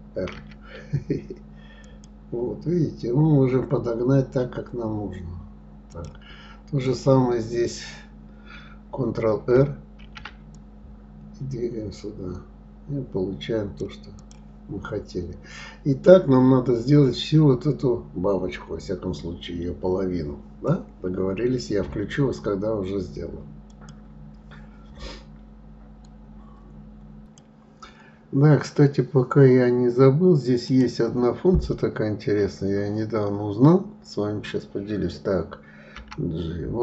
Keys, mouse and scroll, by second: 6.8 click, 10.0 ctrl+r, 15.2-16.1 scroll down 2, 31.0-34.0 drag.